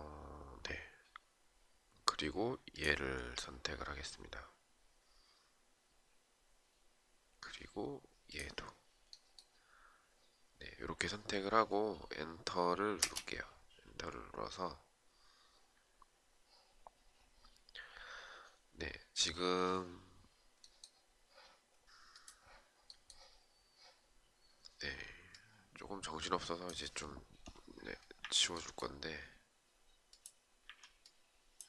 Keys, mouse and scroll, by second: 12.5 space, 27.7 Delete, 30.2 Delete.